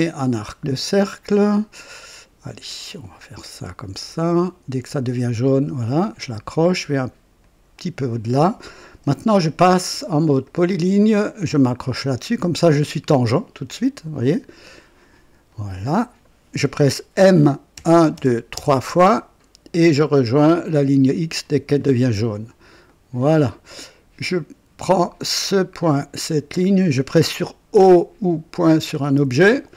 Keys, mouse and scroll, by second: 2.1 click, 5.2 click, 7.4 click, 10.4 click, 11.8 click, 15.4 click, 17.7-18.5 typing, 21.4 click, 22.8 right click, 23.5 right click, 25.4 click, 26.3 click, 28.2-29.2 typing.